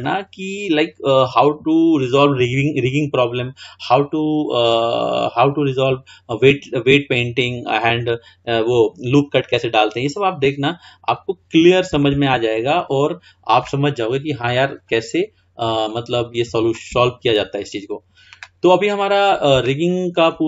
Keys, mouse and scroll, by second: 0.2-3.0 middle drag, 4.2-4.8 scroll down 2, 4.8-5.2 scroll up 3, 10.8-11.2 scroll down 2, 11.2-12.2 scroll up 2, 12.2-14.9 shift+middle drag, 14.9-17.6 drag, 17.6-18.7 scroll down 4, 18.7-19.3 scroll up 4, 19.3-19.9 scroll down 1, 19.9-20.4 scroll down 1.